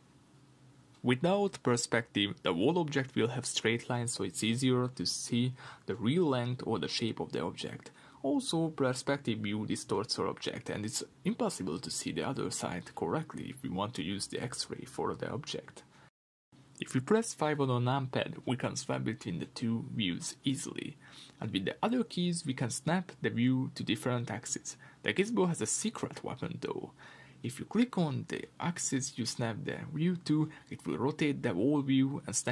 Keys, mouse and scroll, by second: 0.6 click, 1.2-2.1 middle drag, 2.1 click, 2.4-7.2 shift+middle drag, 2.6-3.4 scroll up 2, 4.2 Tab, 5.5 ctrl+r, 7.4 click, 8.4 click, 8.8 middle click, 8.9-10.4 scroll up 2, 9.2-10.4 middle drag, 10.4 click, 11.1-12.7 middle drag, 12.7 click, 16.9 click, 20.1 click, 20.5-22.7 middle drag, 21.3-22.7 scroll down 2, 22.7 KP_5, 23.8 middle click, 26.4 KP_5, 28.4 middle click, 28.7 Tab, 29.0 middle click, 29.7 KP_5, 32.4 KP_1.